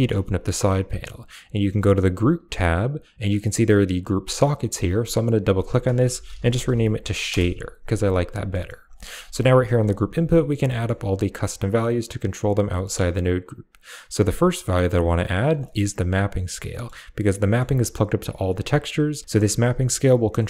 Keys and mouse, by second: 1.5 click, 2.4 click, 4.9 click, 5.1 click, 8.4 click, 8.4 right click, 8.7 a, 9.5 right click, 9.7 g, 9.9 click, 10.6 middle click, 12.1 click, 12.6 shift+middle click, 15.1 click, 15.5 middle click, 16.0 click, 16.6 middle click, 17.3 middle click, 18.8 click, 20.3 middle click.